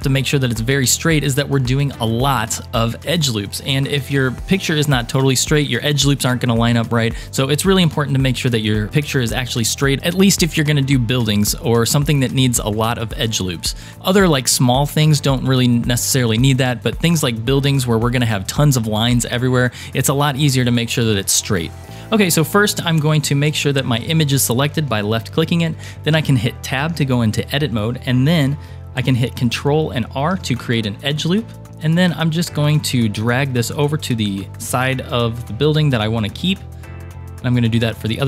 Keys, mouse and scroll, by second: 2.4 scroll down 2, 21.8 Tab, 21.8 shift+middle click, 21.8 click, 23.5 click, 26.2 Tab, 30.4 ctrl+r, 34.9 ctrl+r.